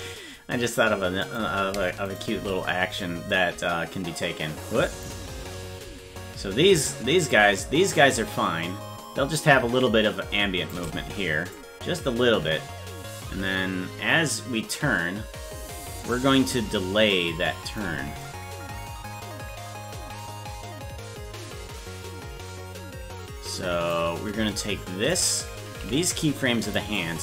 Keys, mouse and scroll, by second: 1.2 click, 2.1 shift+right click, 3.3-5.0 drag, 7.3-10.7 drag, 11.5-17.8 drag, 18.2-23.9 drag, 25.1 right click, 25.8 g, 26.9-27.2 drag.